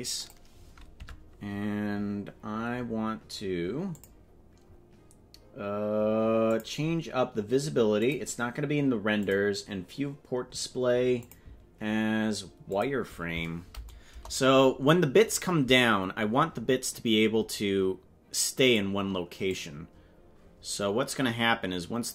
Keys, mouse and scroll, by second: 1.0 Tab, 3.9 click, 6.5 click, 8.1 click, 9.3 click, 9.9-10.9 scroll down 7, 11.2-12.8 drag, 14.1 KP_0, 17.5-18.7 drag, 19.5-22.1 drag.